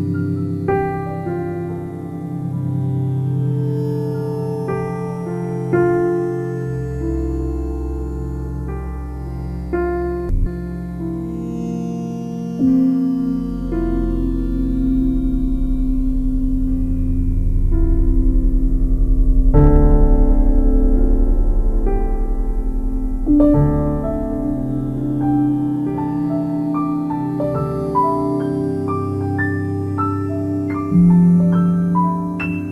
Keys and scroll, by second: 16.4 ctrl+u.